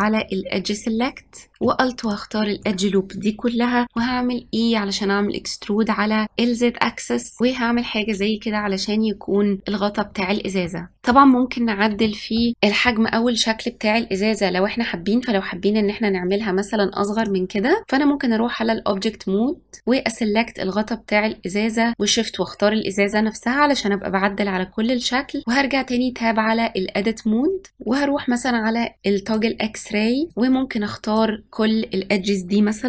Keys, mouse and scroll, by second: 1.9 alt+click, 3.9 e, 7.8-10.1 scroll down 9, 10.1-10.5 scroll up 3, 10.5-15.3 middle drag, 17.1-19.6 drag, 22.0 shift+click, 25.4 Tab, 29.2-30.3 drag.